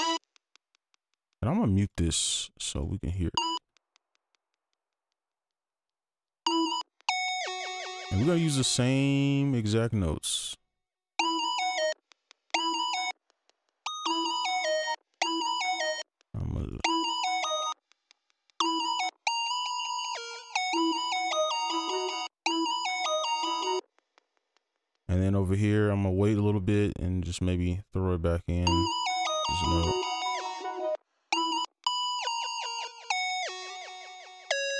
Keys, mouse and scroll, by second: 0.1 space, 0.4 ctrl+click, 3.0 right click, 3.3 space, 3.5 space, 3.9 ctrl+click, 4.7 shift+2, 4.7 shift+click, 5.4 right click, 6.4 right click, 6.4 space, 6.8 space, 7.6 right click, 8.0 ctrl+click, 9.1 shift+click, 10.0 ctrl+click, 11.1-19.0 typing, 11.4 right click, 15.8 ctrl+click, 16.4-16.7 shift+scroll down 1, 16.7 right click, 19.5 double click, 20.7 space, 22.2 space, 22.4 space, 23.7 space, 24.8 right click, 28.6 space, 30.9 space, 31.3 space, 31.6 space, 32.2 double click.